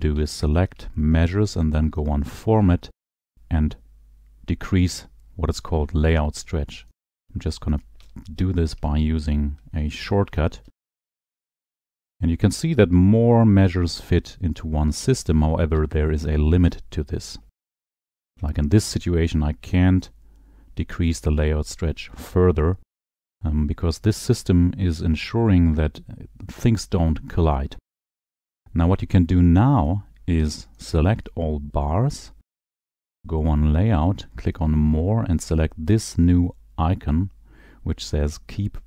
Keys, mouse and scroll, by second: 0.7 shift+click, 2.2 click, 6.7 click, 7.1 click, 8.0 click, 8.8 shift+click, 10.2 ctrl+alt+7, 11.0 ctrl+alt+7, 11.3 ctrl+alt+7, 11.5 ctrl+alt+7, 12.2 click, 15.5 click, 16.5 shift+click, 18.0 ctrl+alt+7, 18.0 ctrl+alt+7, 18.1 ctrl+alt+7, 18.3 ctrl+alt+7, 19.2 click, 30.0 click, 31.0 shift+click, 33.1 click, 34.7 click.